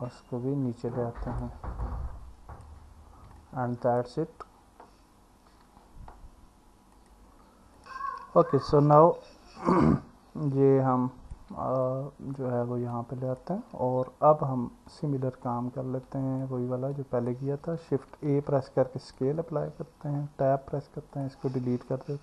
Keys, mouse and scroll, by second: 1.8 alt+middle click, 3.4 alt+middle click, 5.5 Tab, 8.2 click, 10.5-11.4 alt+middle drag, 12.9-13.4 alt+middle drag, 14.9 click, 16.1 click, 17.0 alt+middle click, 18.3 ctrl+a, 20.3 Tab.